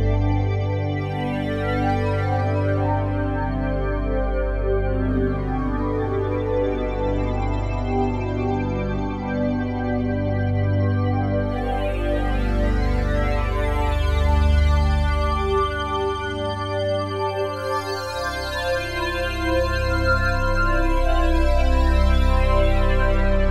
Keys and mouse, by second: 0.8 ctrl+s, 0.8 typing, 1.1 alt+a, 1.6-3.9 ctrl+alt+drag, 4.3 Delete, 5.4-7.2 ctrl+alt+drag, 7.1 ctrl+s, 8.6 shift+s, 9.3 click, 10.4 click, 11.3 click, 12.2-13.3 ctrl+alt+drag, 13.3 Delete, 14.1 ctrl+s, 15.1 click, 16.4 click, 16.6 click, 17.7-19.3 drag, 19.7 click, 22.0 click.